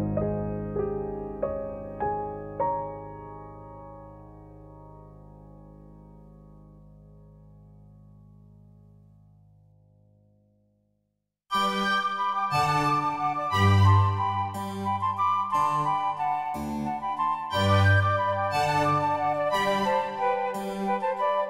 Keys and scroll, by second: 18.8-19.8 typing.